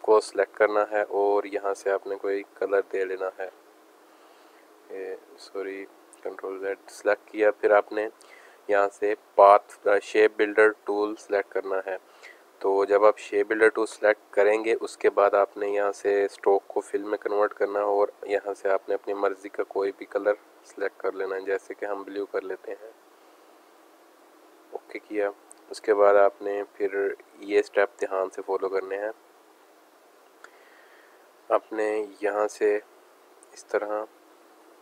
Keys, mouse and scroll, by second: 2.1 click, 2.7 click, 5.4 click, 6.2 ctrl+z, 12.9 click, 16.4 click, 17.5 click, 21.9 click, 22.0 click, 23.1-24.3 drag, 24.8 click, 24.9 click, 26.4 alt+scroll up 1, 26.7 click, 27.1 space, 27.5 click, 31.5 space, 31.6 click, 32.9-34.3 drag.